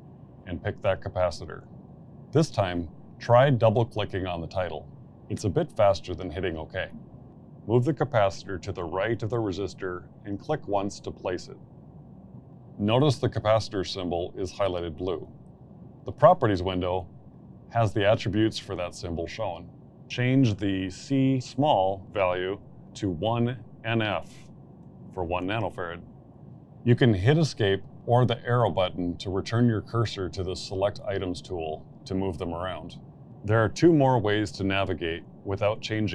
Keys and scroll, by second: 0.2 shift+s, 0.7 shift+m, 21.6 1, 22.3 n, 23.3 shift+f, 26.6 Return.